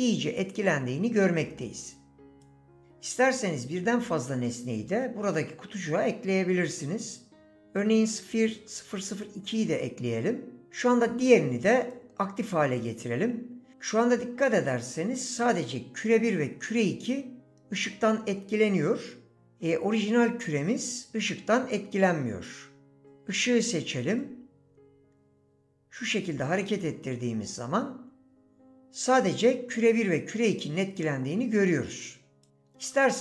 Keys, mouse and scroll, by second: 7.8 drag.